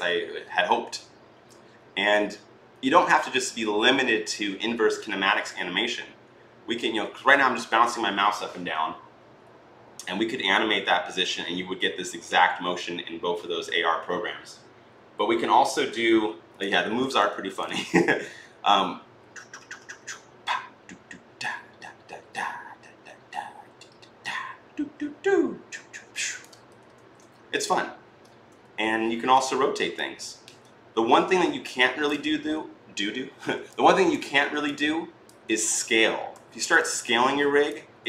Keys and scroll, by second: 16.6 ctrl+z, 26.7 ctrl+z, 29.1 r, 32.0 ctrl+z, 35.4 ctrl+z, 36.1 t.